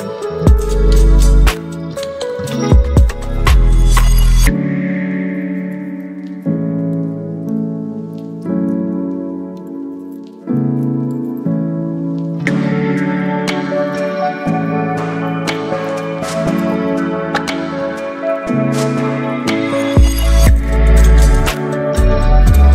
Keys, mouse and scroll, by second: 6.5 right click, 7.2 click, 16.7 click, 18.8 t, 20.3 click.